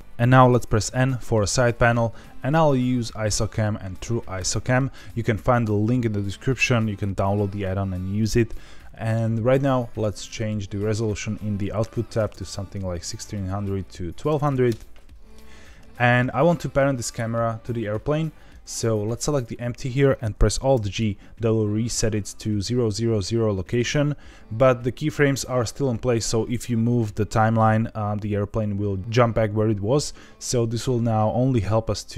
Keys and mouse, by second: 0.8 n, 2.3 click, 4.4-10.0 drag, 10.2 right click, 11.0-15.3 drag, 12.3 KP_0, 14.4 KP_0, 20.7 alt+g.